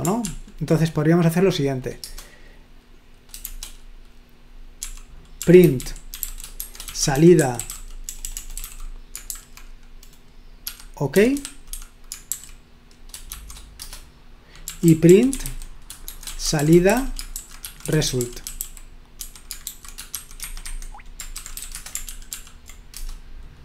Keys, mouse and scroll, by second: 0.2 ctrl+p, 2.0 Return, 3.4 shift+g, 4.8-9.7 typing, 11.0-12.3 typing, 13.3 typing, 13.8 Return, 14.5-20.2 typing, 20.5 Escape, 20.8 Escape, 21.4-23.4 typing.